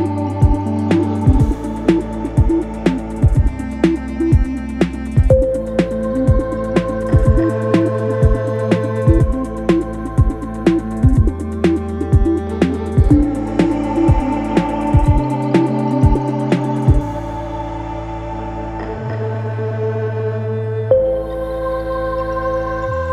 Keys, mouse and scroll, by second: 11.8-15.4 shift+drag, 17.3-23.1 shift+drag.